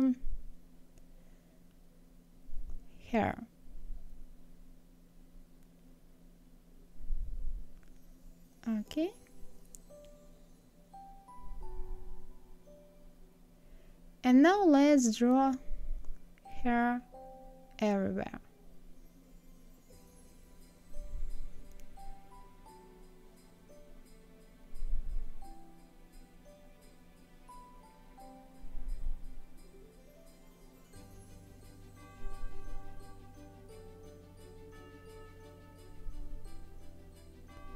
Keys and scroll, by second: 20.6 ctrl+v, 23.2 KP_0, 23.3 Return, 29.9 ctrl+z, 32.0 ctrl+z, 35.7 ctrl+z.